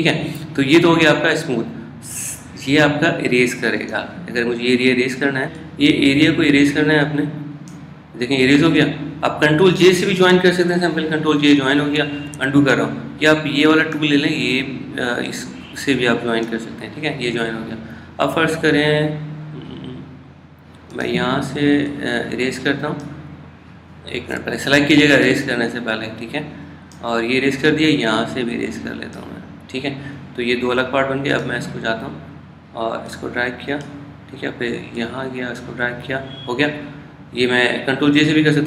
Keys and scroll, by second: 11.7 super+j, 13.4 super+z.